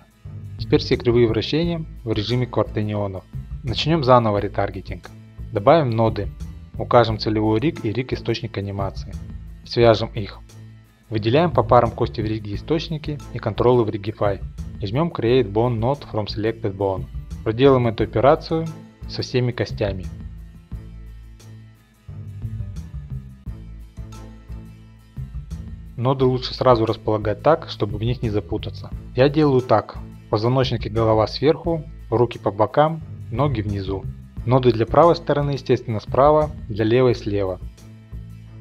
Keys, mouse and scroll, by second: 3.8 click, 4.0 click, 4.3 click, 4.8 a, 5.1 click, 5.4 click, 5.5-6.4 scroll, 5.8 middle click, 6.4 click, 7.1 click, 10.6-11.3 scroll, 11.3 shift+click, 12.1 click, 13.6 click, 14.3-15.7 scroll, 15.7 scroll, 17.1 click, 17.6 click, 18.8 middle click, 18.8 shift+middle click, 18.9 click, 19.0 shift+click, 19.1 click, 19.2 click, 19.4 shift+click, 19.4 click, 19.5 click, 19.6 click, 19.7 middle click, 19.7 click, 19.8 shift+click, 19.9 click, 20.0 click, 20.2 shift+middle click, 20.2 click, 20.2 shift+click, 20.3 click, 20.4 click, 20.7 middle click, 20.8 shift+middle click, 20.8 click, 20.9 middle click, 20.9 middle click, 20.9 shift+click, 21.1 click, 21.2 click, 21.2 middle click, 21.3 middle click, 21.4 click, 21.4 shift+middle click, 21.5 click, 21.6 shift+click, 21.7 click, 21.8 click, 21.9 shift+middle click, 22.0 click, 22.0 middle click, 22.1 shift+click, 22.2 click, 22.5 click, 22.5 middle click, 22.7 shift+click, 22.7 click, 22.8 click, 22.9 click, 23.0 shift+click, 23.1 click, 23.2 click, 23.3 click, 23.4 shift+click, 23.5 click, 23.6 click, 23.8-24.2 scroll, 23.9 click, 24.2 shift+click, 24.3 click, 24.4 click, 24.5 middle click, 24.6 click, 24.7 shift+click, 24.8 click, 24.9 click, 25.2 shift+click, 25.3 click, 25.4 click, 25.5 shift+middle click, 25.6 click, 25.7 middle click, 25.7 middle click, 25.9 shift+click, 25.9 click, 26.0 click, 26.1 middle click, 26.2 shift+middle click, 26.3 middle click, 26.4 shift+middle click, 26.4 click, 27.3 shift+click, 28.3 click, 29.0 click, 30.2 click, 30.6 middle click, 30.7 middle click, 31.5 shift+click, 32.5 click, 33.4 click, 34.5 click, 34.7-35.4 scroll, 35.9 shift+middle click, 35.9 scroll, 36.0 click, 36.5-37.0 scroll, 37.0 shift+click, 37.5 click, 37.8 click, 38.4 shift+middle click.